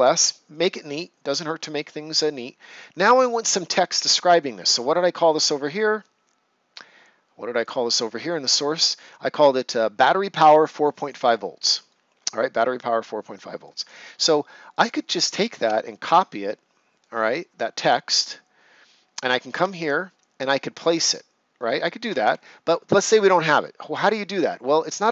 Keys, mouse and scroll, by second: 4.7 click, 7.6 click, 8.9 right click, 11.3-11.6 ctrl+scroll down 1, 11.8 right click, 14.7 click, 16.0 c, 18.1 click, 22.2 Escape.